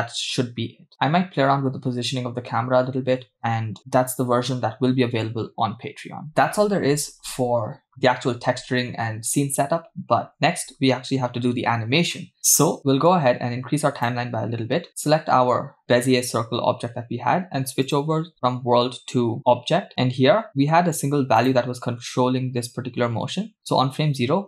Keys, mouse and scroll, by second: 10.9-11.7 scroll down 1, 11.7-12.1 scroll down 5, 12.1 middle click, 13.1-14.2 drag, 14.9 click, 17.9-19.4 drag, 19.9 middle click, 21.4 click.